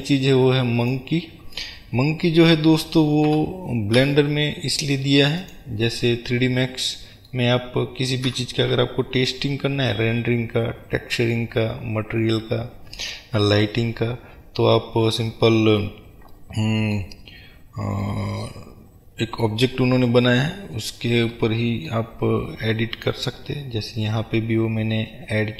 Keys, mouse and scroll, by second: 5.7 click, 6.0-23.0 middle drag, 7.9-8.3 scroll down 2, 8.3 KP_Decimal, 9.3-10.1 scroll down 2, 19.8-20.3 scroll up 2, 20.3-21.4 scroll down 2, 23.0-25.5 drag.